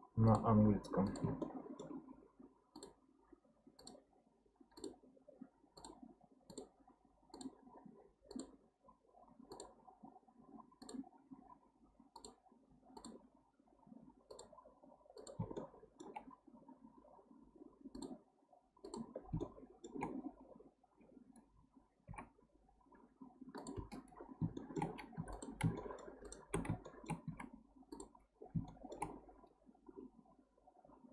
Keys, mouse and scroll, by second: 1.4-4.4 shift+middle drag, 15.6-18.6 shift+middle drag, 19.1 scroll down 1, 19.4-20.6 shift+middle drag, 20.6-23.5 scroll down 1, 23.5 scroll down 1, 24.3 scroll down 1, 24.5 shift+middle click, 25.1 3, 25.3 click, 25.8-26.2 shift+middle drag, 26.2 shift+click, 26.8-27.2 shift+middle drag, 27.2 x, 28.7 shift+middle click, 29.3-30.0 scroll up 1, 30.2-31.1 scroll down 1.